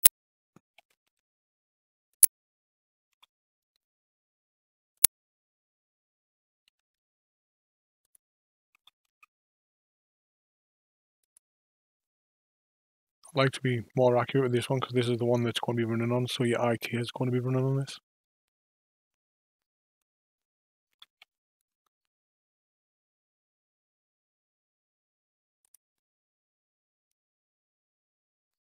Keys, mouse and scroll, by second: 0.7 g, 3.1 s, 6.5 g, 8.7 s, 14.4 KP_5, 20.9 s.